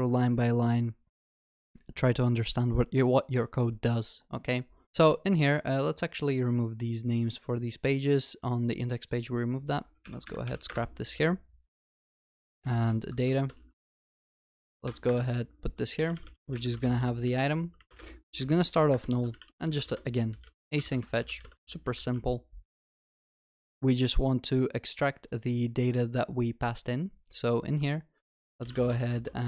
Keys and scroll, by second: 10.1 ctrl+y, 22.1 ctrl+s, 25.5 ctrl+Tab.